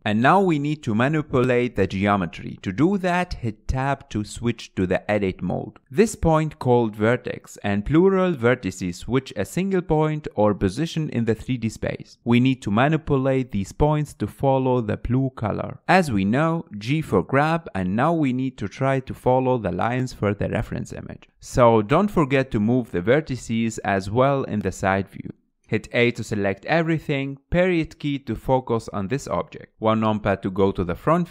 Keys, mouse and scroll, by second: 0.0-0.5 shift+middle drag, 0.4 click, 3.5 scroll up 6, 3.6 Tab, 6.1 click, 7.6 g, 7.7 g, 10.1 click, 10.5 click, 10.7 g, 12.2 click, 12.4 g, 17.0 g, 19.0 click, 19.7 g, 21.3 click, 22.0 g, 24.0 click, 24.2 g, 25.7 middle click, 26.4 a, 26.7 KP_Decimal, 27.5 scroll down 4, 27.7-28.7 middle drag, 28.7 scroll down 4, 29.0-31.3 middle drag.